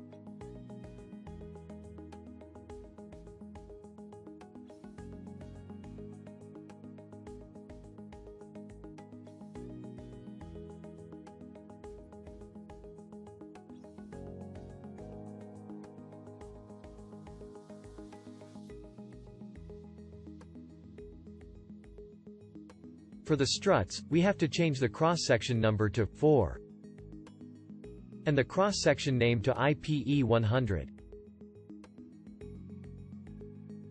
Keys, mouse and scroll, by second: 0.5-3.6 shift+drag, 18.3-20.7 alt+drag, 23.1-26.3 shift+drag.